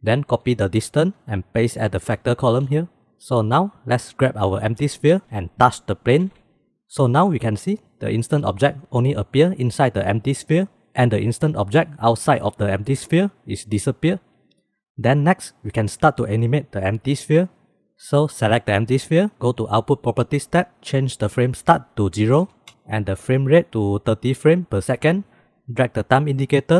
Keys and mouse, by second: 1.2 ctrl+c, 2.7 ctrl+v, 3.8 click, 5.1 g, 25.3 ctrl+s, 26.6-26.7 drag.